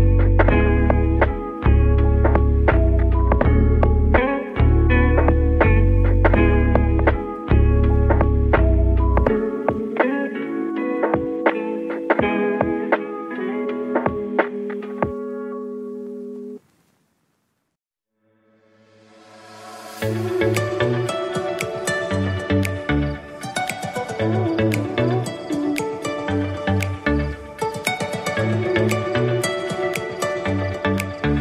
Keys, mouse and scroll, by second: 0.6 KP_1, 2.5 s, 4.2 s, 7.8-9.5 middle drag, 9.5 s, 12.2 KP_7, 13.5 r, 16.3 click, 16.5-19.9 middle drag, 19.9 click, 21.7 click, 24.8-25.9 drag, 28.1-28.8 middle drag, 28.8 click, 29.2-31.4 middle drag.